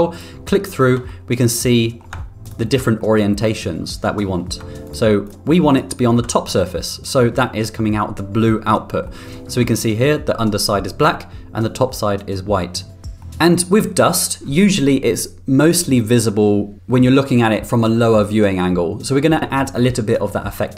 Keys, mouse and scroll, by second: 0.2 ctrl+click, 1.1-2.0 middle drag, 2.5 ctrl+click, 3.0-4.4 middle drag, 4.9 ctrl+click, 5.3 ctrl+click, 5.7 ctrl+click, 9.1-10.4 middle drag, 13.2 middle click.